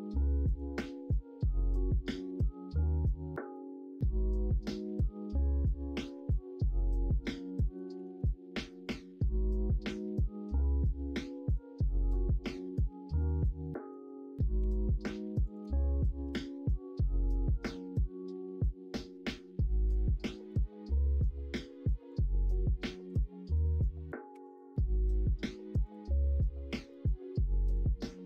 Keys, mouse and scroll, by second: 0.3 middle click, 0.5 scroll down 1, 1.9-3.0 scroll up 1, 3.0 middle click, 3.0 scroll down 1, 3.5 scroll up 1, 3.7-5.4 middle drag, 6.0 ctrl+r, 7.6 middle click, 8.0 ctrl+z, 8.7 middle click, 9.9 middle click, 11.2 middle click, 12.5 3, 13.7 middle click, 14.6 2, 16.2 ctrl+b, 23.0-24.3 drag, 24.3 3, 26.6 3.